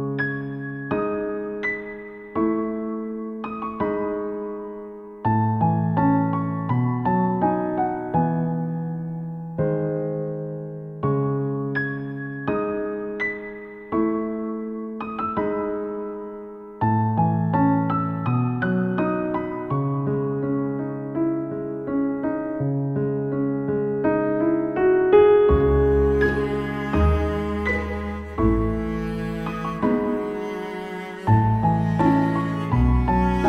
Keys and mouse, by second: 0.2 ctrl+z, 0.5 ctrl+z, 1.6 ctrl+z, 1.9 ctrl+z, 2.0 ctrl+z, 2.4 ctrl+z, 2.7 ctrl+z, 3.5 ctrl+z, 3.9 ctrl+z, 4.1 ctrl+z, 4.2 ctrl+z, 4.6 ctrl+z, 5.2 ctrl+z, 7.1 ctrl+z, 7.7 ctrl+z, 10.0 ctrl+z, 10.2 ctrl+z, 12.3 ctrl+z, 12.8 ctrl+z, 13.1 ctrl+z, 13.4 ctrl+z, 14.2 ctrl+z, 14.4 ctrl+z, 14.9 ctrl+z, 17.2 ctrl+z, 18.8 ctrl+z, 19.3 ctrl+z, 19.7 ctrl+z, 20.0 ctrl+z, 20.2 ctrl+z, 21.3 ctrl+z, 22.0 ctrl+z, 22.3 ctrl+z, 22.7 ctrl+z, 23.1 ctrl+z, 23.4 ctrl+z, 23.6 ctrl+z, 23.7 ctrl+z, 24.4 ctrl+z, 25.0 ctrl+z, 25.6 ctrl+z, 27.1 ctrl+z, 27.5 ctrl+z, 28.7 ctrl+z, 30.2 ctrl+z, 32.3 ctrl+z, 33.1 ctrl+z.